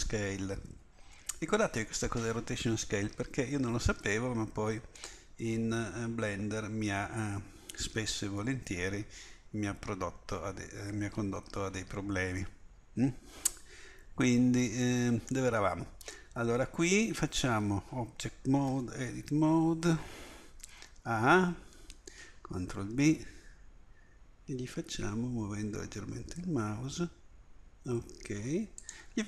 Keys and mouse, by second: 0.0 ctrl+a, 5.1-6.1 middle drag, 18.7 Tab, 20.6 a, 20.8 a, 22.7 ctrl+b.